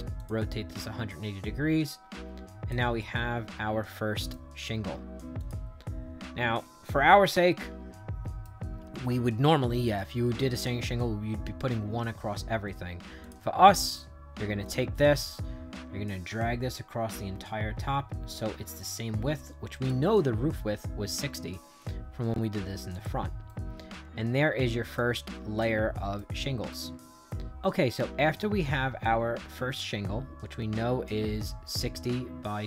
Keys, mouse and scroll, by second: 0.1 click, 0.7-2.6 drag, 2.9-4.2 right drag, 5.3 click, 6.5 middle click, 7.5 shift+right click, 13.1 click, 14.6-19.8 drag, 22.8 click, 23.4-24.9 right drag, 25.5 right click, 26.6 click.